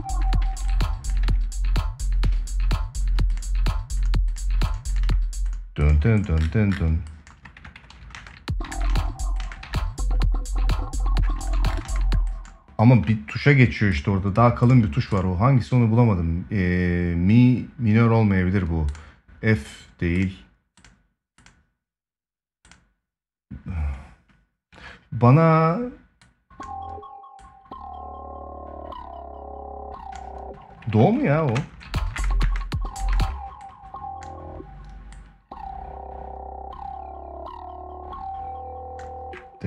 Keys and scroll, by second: 0.1 ctrl+s, 4.7 space, 8.4 ctrl+s, 11.6 space, 31.3 space, 31.9 space, 32.7 space.